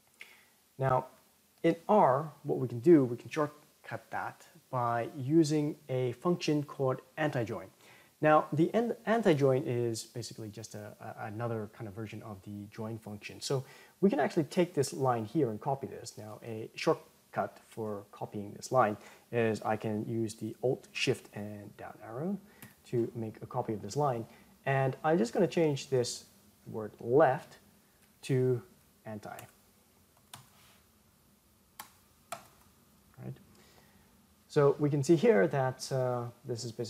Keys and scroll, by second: 19.9 alt+shift+Down, 32.3 ctrl+Return.